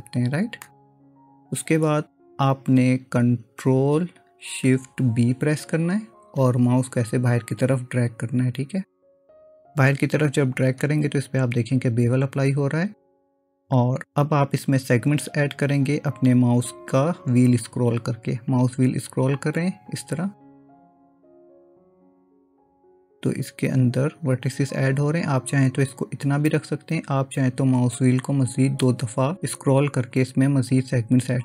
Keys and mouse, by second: 5.5 ctrl+shift+b.